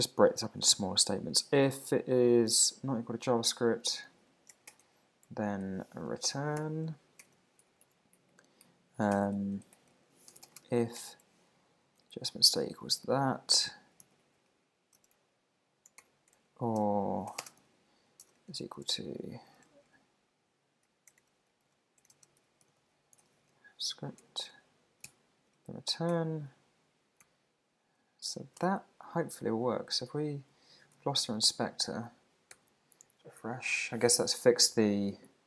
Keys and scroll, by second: 0.0 Left, 3.8 shift+), 3.9 shift+space, 4.4 shift+{, 4.7 Return, 5.3 Up, 5.6 Tab, 6.9 Down, 7.8 super+Left, 8.2 Right, 9.7 Return, 12.1 alt+shift+Right, 13.5 alt+shift+Left, 14.0 super+c, 14.2 super+Right, 14.5 Left, 16.0 Return, 17.6 super+v, 21.0 shift+1, 24.4 Tab, 25.1 super+s, 25.6 Down, 26.1 Return, 27.2 super+s, 28.6 super+Tab, 30.1 super+`, 31.2 alt+super+i, 32.5 super+r.